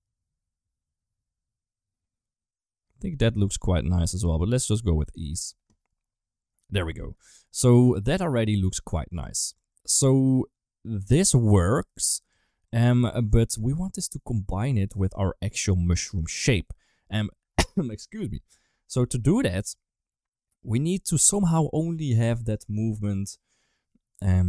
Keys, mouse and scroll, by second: 4.4 click, 5.7-6.3 middle drag, 7.5 ctrl+s, 7.6 shift+middle click, 8.1 middle click, 8.5 shift+middle click, 9.1 Tab, 9.4 Tab, 9.8-11.7 middle drag, 12.1 Tab, 12.5 Tab, 12.8 shift+middle click, 13.8 middle drag, 14.8 shift+middle click, 15.7 shift+middle drag, 16.2 middle click, 21.0 middle click.